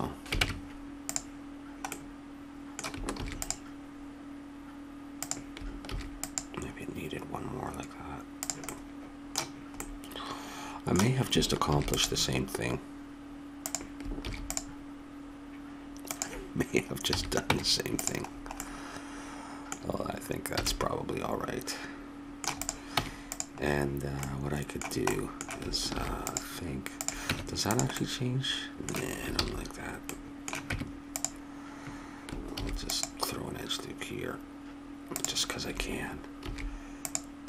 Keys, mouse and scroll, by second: 0.4 ctrl+Tab, 3.1 ctrl+r, 5.9 ctrl+r, 8.7-10.5 middle drag, 10.6 middle click, 11.7 ctrl+r, 14.2 ctrl+r, 17.1 a, 17.5 Tab, 18.4 middle click, 20.6 a, 20.8 middle click, 21.0 middle click, 21.5 middle click, 22.6 right click, 22.9 Tab, 24.2 middle click, 25.9 ctrl+r, 27.3 Tab, 29.4 ctrl+z, 30.7 Tab, 32.5 ctrl+r, 36.4 ctrl+r.